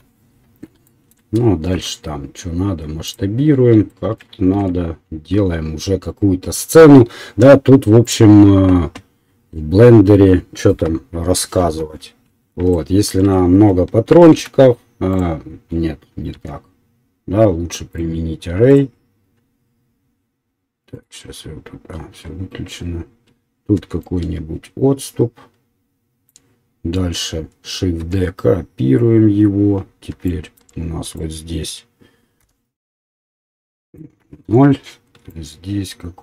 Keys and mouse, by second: 1.7 s, 4.5 ctrl+a, 7.2-15.3 middle drag, 11.6 KP_7, 14.1 shift+d, 17.2 ctrl+z, 18.0 click, 23.7-27.1 shift+drag, 28.3 shift+d, 32.7 BackSpace, 35.6-36.2 shift+drag.